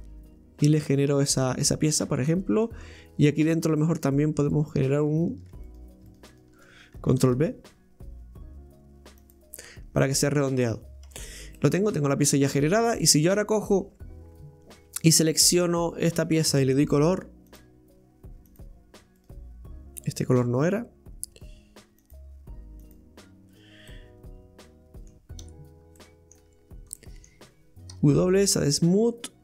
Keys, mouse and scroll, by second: 2.3 middle click, 2.8-3.5 scroll up 2, 3.5 scroll down 1, 4.9 right click, 5.7 right click, 6.1 alt+shift+right click, 6.3 alt+shift+right click, 7.2 ctrl+b, 9.6-10.0 scroll down 4, 10.0 middle click, 10.7-11.1 scroll up 1, 11.1 Tab, 11.5-13.7 middle drag, 13.7 right click, 15.6 right click, 18.6-19.2 drag, 19.2 right click, 22.9-23.9 drag, 23.9-25.4 middle drag, 25.4 Tab, 26.0 middle click, 26.4 Tab, 27.0-29.4 middle drag.